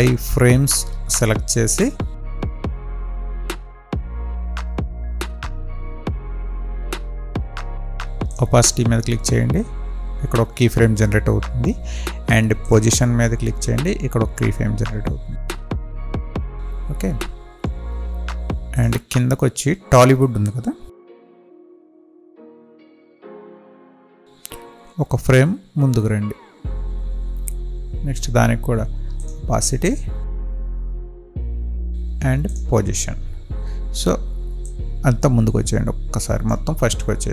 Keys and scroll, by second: 25.6 Left.